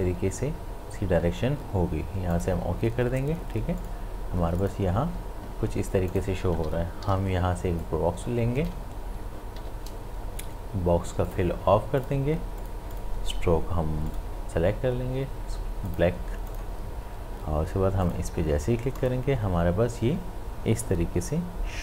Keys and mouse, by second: 2.3 click, 2.3 click, 7.0 m, 7.8-9.6 drag, 9.6 v, 11.3 click.